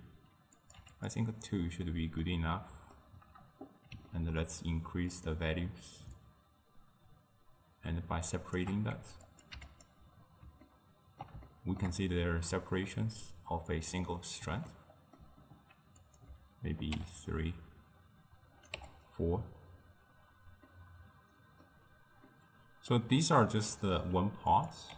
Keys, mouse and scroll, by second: 0.6-1.5 drag, 1.9-5.2 middle drag, 5.2-9.2 drag, 9.3 click, 10.7-13.7 ctrl+middle drag, 13.7 click, 14.7-16.0 ctrl+middle drag, 16.0-17.5 drag, 18.6 click, 20.7-23.0 middle drag, 23.0-23.4 scroll down 2, 23.4-24.5 middle drag, 24.5-24.9 drag.